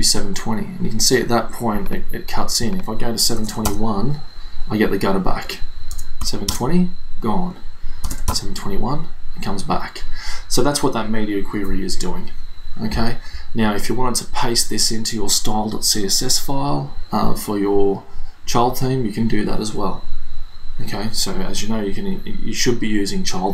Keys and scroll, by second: 3.4 BackSpace, 3.7 Return, 6.0 BackSpace, 6.2 0, 6.5 Return, 8.1 BackSpace, 8.3 Return.